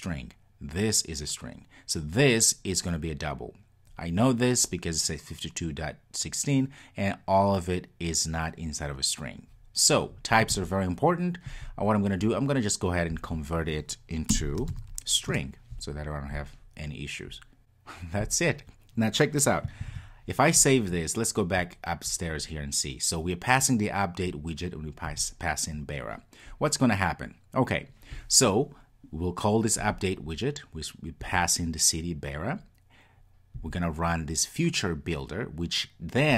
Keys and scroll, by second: 15.4 Return, 19.9 super+s.